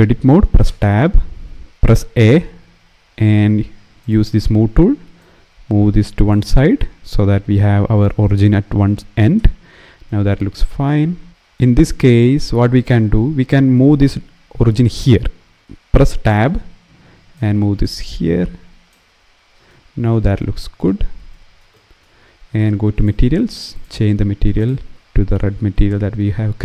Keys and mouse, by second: 0.3 Tab, 1.9 a, 3.7 click, 4.9 click, 9.1 Tab, 9.8 click, 15.3 Tab, 15.7 Tab, 15.9 Tab, 18.7 Tab, 20.1 click, 22.6 click, 23.4 click.